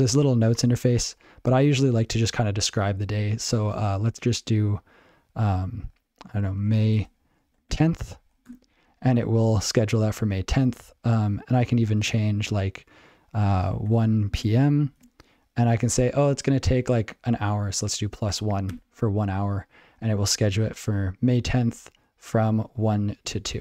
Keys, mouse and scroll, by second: 6.3-8.2 typing, 8.5 Return, 11.8 ctrl+n, 11.9 ctrl+s, 12.0 ctrl+n, 13.8-14.9 typing, 18.3 1, 18.7 Return.